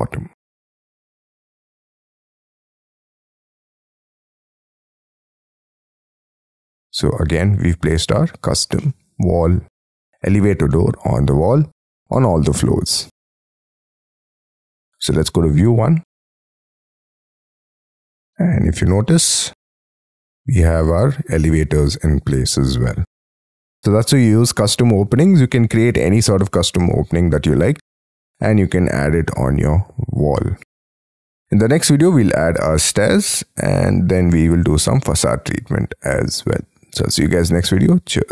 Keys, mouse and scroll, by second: 2.0 scroll down 3, 4.5 shift+scroll down 1, 5.5 shift+click, 6.0 shift+middle click, 8.0 space, 8.1 scroll down 5, 8.5 scroll up 5, 8.8 shift+middle click, 9.8 scroll down 5, 10.1-10.6 scroll up 11, 10.7 middle click, 11.5-12.4 scroll down 20, 12.6 Escape, 12.9 Escape, 13.1 Escape, 17.8-18.2 scroll up 14, 18.4 middle click, 19.3 scroll down 1, 22.9-24.0 scroll down 24, 24.3 middle click, 26.1 scroll up 5, 26.4 middle click, 32.8 middle click.